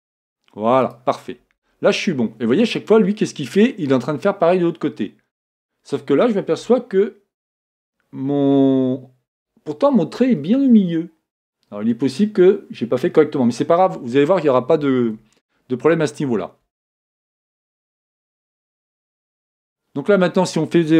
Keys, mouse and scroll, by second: 1.1-2.7 drag, 1.3-4.0 middle drag, 7.0-8.9 middle drag, 15.4-18.6 middle drag, 19.3-20.6 scroll up 1, 20.6-20.9 scroll up 1.